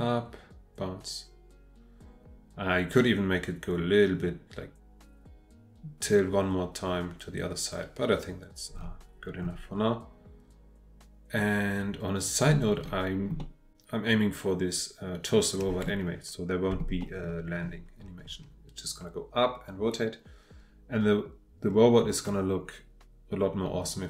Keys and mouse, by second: 13.4-15.8 middle drag, 17.0 shift+middle drag.